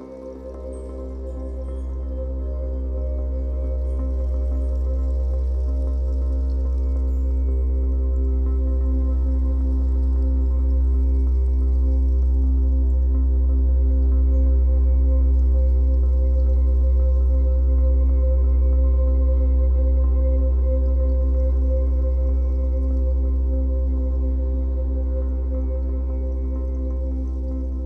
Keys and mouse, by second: 1.7 click, 2.1 click, 2.8 click, 4.1 ctrl+alt+click, 4.6 alt+shift+click, 5.0-6.6 alt+shift+drag, 7.4 click, 8.1 ctrl+alt+click, 9.4-15.2 drag, 15.8 ctrl+alt+click, 16.1 ctrl+alt+click, 18.3 click, 18.9-20.0 drag, 20.5 click, 22.4-24.6 drag, 24.6-25.5 typing.